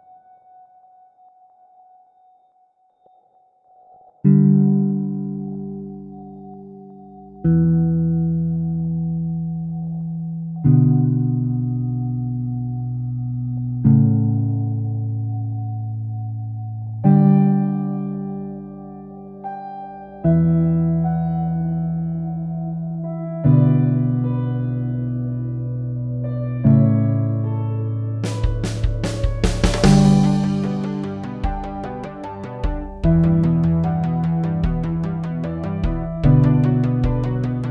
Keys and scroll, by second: 0.2 Up, 0.9 Up, 0.9 Return, 16.5-17.0 typing, 18.2 Up, 18.2 Return, 32.9-33.9 typing, 35.1 typing.